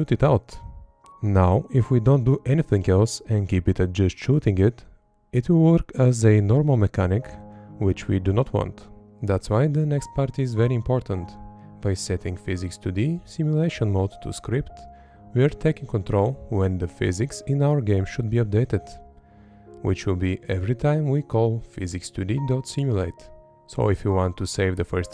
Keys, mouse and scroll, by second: 1.4 Up, 2.7 Up, 3.4 Up, 5.3 Right, 8.5 Up, 10.0 Up, 10.5 Up, 12.3 Up, 14.0 Up, 16.6 Left, 19.7 Up, 20.6 Up, 23.5 Left.